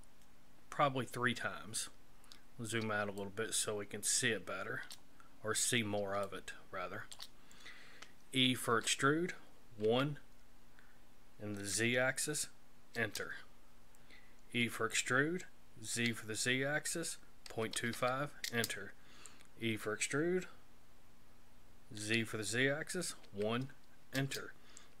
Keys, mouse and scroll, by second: 2.3-3.0 scroll down 3, 3.2 shift+middle click, 5.7-6.1 scroll down 1, 6.2 shift+middle click, 8.7 e, 14.6 e, 19.7 e.